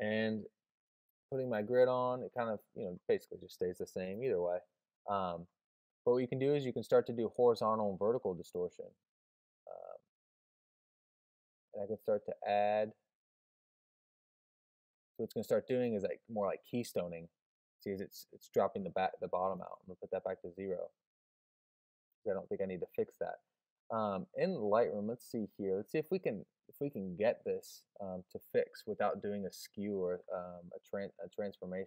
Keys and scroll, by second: 0.8 alt+super+o, 4.0 alt+super+o.